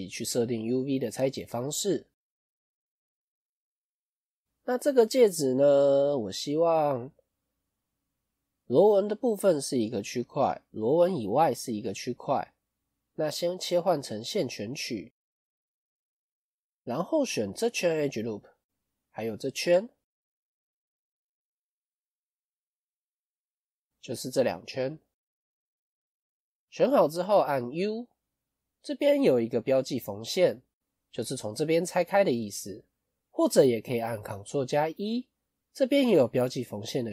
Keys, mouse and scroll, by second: 4.0 KP_1, 4.7-5.3 scroll down 1, 5.6 KP_5, 6.2 scroll up 3, 7.0-8.0 scroll down 2, 8.0-9.0 scroll down 1, 14.0-14.9 scroll up 4, 14.9 middle click, 15.7-16.1 scroll up 2, 16.1 middle click, 18.2 middle click, 19.9 alt+shift+click, 20.4-20.7 scroll down 2, 20.9 middle click, 23.0 click, 23.4 scroll up 1, 23.8 middle click, 25.3 KP_1, 26.0-26.6 scroll down 2, 26.6-28.5 scroll down 3.